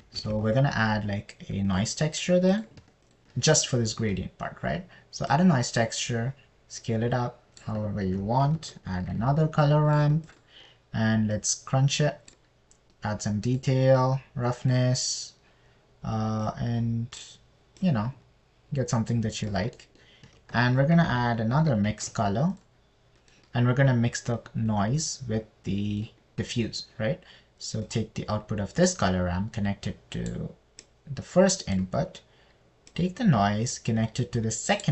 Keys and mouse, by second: 0.8 shift+a, 6.7 right click, 7.2 click, 7.8 right click, 8.1 click, 8.5 right click, 9.5 shift+a, 12.7 right click, 12.9-13.8 drag, 13.0 middle click, 13.3 middle click, 14.4 click, 15.4 click, 17.8-18.7 drag, 19.3 click, 19.3 middle click, 19.5 click, 20.0 middle click, 20.1 click, 20.2 middle click, 20.3 click, 20.5 middle click, 21.2 middle click, 21.8 shift+a, 24.6 middle click, 25.8 middle click, 29.3 drag, 32.2 click, 34.3 drag.